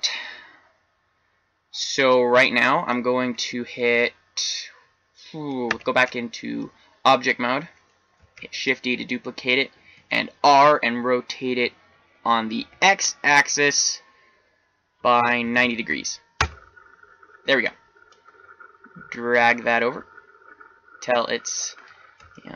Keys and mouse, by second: 5.6 Tab, 8.3 shift+d, 18.0-20.0 drag, 22.1-22.5 middle drag.